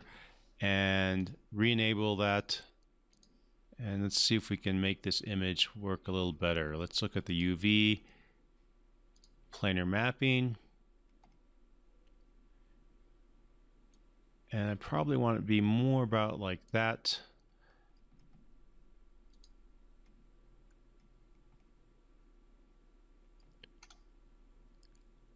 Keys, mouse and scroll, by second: 1.2 click, 7.3 click, 13.9-16.7 drag, 19.3 click, 23.8-25.3 scroll down 1.